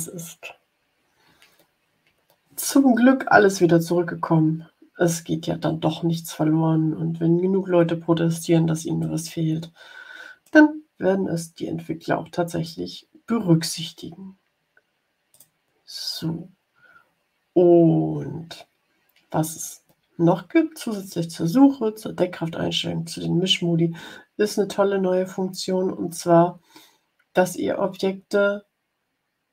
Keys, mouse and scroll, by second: 0.3-2.8 drag, 8.9-10.5 drag, 15.2 click, 29.4-29.5 drag.